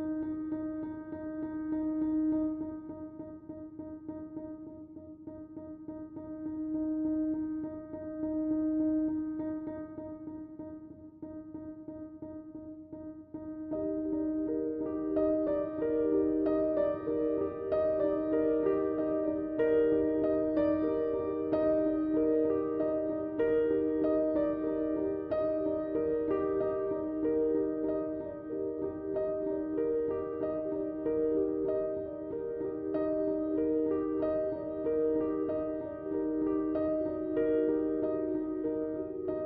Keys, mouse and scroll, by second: 0.6 Tab, 1.9 click, 8.6-12.3 drag, 16.7 click, 18.6 Tab, 19.6 click, 27.8 Tab, 28.7-39.4 drag.